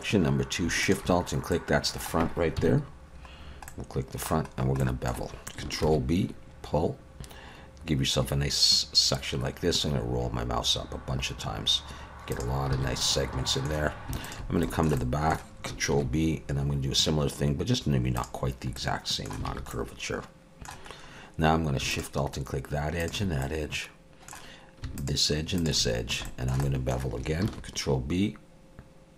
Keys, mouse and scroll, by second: 0.8 alt+shift+click, 1.5 middle click, 2.6 KP_1, 3.4 scroll down 2, 3.7 middle click, 4.5 scroll up 1, 4.8 shift+middle click, 5.8 ctrl+b, 12.8 alt+a, 13.0 middle click, 14.2 alt+shift+click, 14.6 shift+middle click, 15.0 middle click, 15.9 ctrl+b, 18.8 middle click, 19.5 alt+a, 19.7 middle click, 20.9-21.8 scroll up 1, 21.9 alt+shift+click, 23.2 alt+shift+click, 23.4 middle click, 25.0 alt+shift+click, 26.2 shift+middle click, 26.6 middle click, 27.4 ctrl+b.